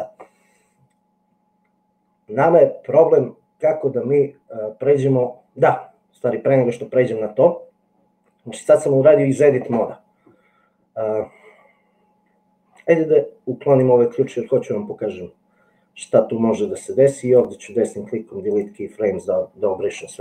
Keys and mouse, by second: 18.6 click, 18.8 right click.